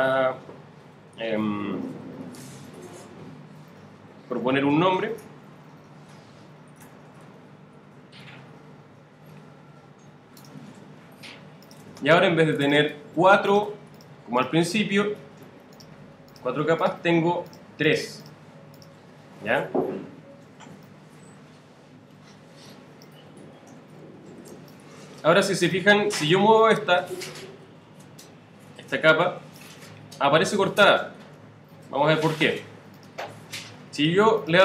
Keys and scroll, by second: 6.6-7.5 typing, 23.5 super+z, 24.5 super+space, 31.1 super+z.